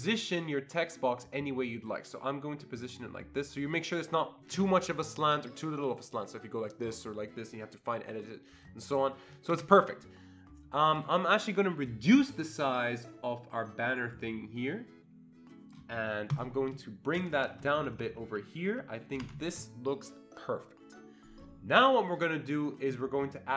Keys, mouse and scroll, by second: 6.2-8.6 drag, 9.6 ctrl+z, 12.7-15.8 drag, 17.1 Escape, 17.6 Down, 17.8 Down, 17.9 Down, 18.1 Down, 18.3 Down, 18.7 Down, 19.2 Escape.